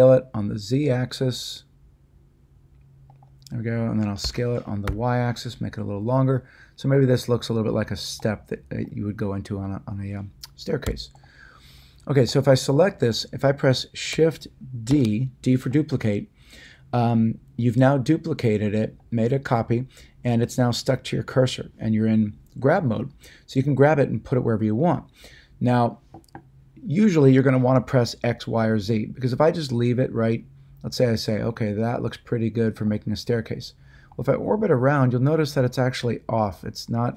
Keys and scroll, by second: 4.2 s, 4.8 y, 10.8 x, 14.9 d.